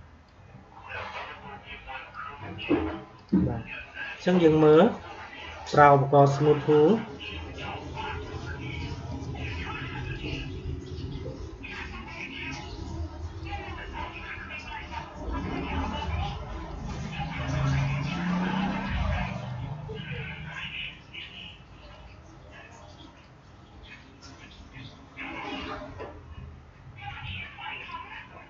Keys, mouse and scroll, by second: 9.0-28.4 drag.